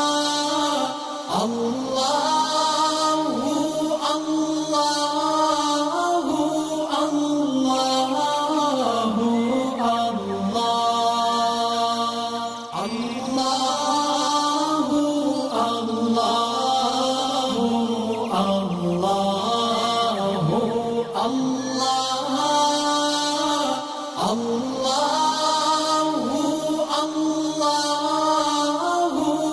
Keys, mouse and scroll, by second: 0.9 alt+scroll down 1, 1.5 alt+scroll down 1, 1.7 space, 1.7-6.7 drag, 7.6 click, 8.9 click, 9.7-10.4 alt+scroll up 5, 10.4 space, 10.5 click, 11.5-12.5 click, 12.6 alt+scroll down 1, 13.4 click, 14.0 space, 14.1 click, 15.1 click, 18.0 alt+scroll down 1, 18.1 click, 22.0-23.0 drag.